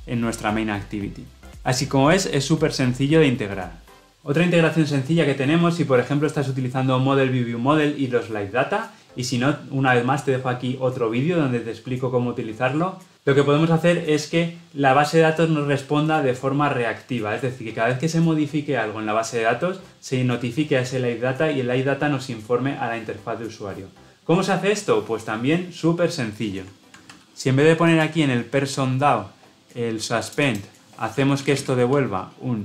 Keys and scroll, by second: 31.3 Delete.